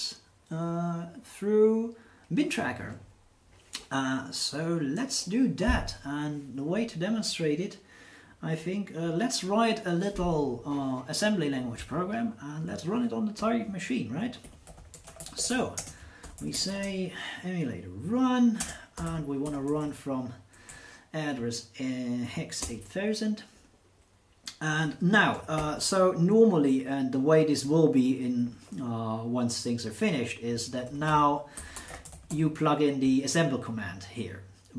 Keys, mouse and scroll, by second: 14.2-17.1 typing, 18.6-20.7 typing, 22.6 Return, 25.6 shift+8, 30.6-32.9 typing.